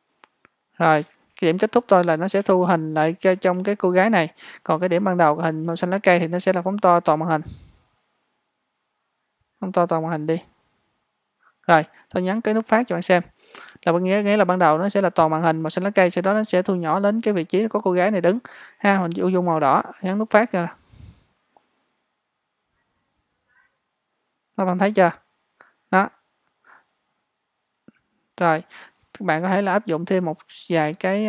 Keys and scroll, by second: 30.9 space.